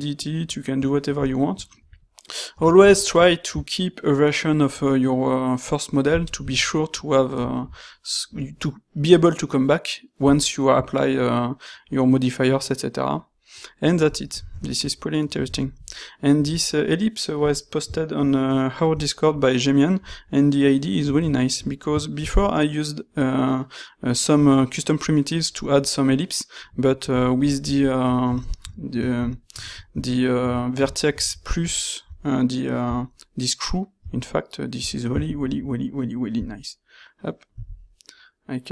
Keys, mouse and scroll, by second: 6.5 z, 22.2 shift+a, 28.2 q, 35.2 ctrl+shift+q.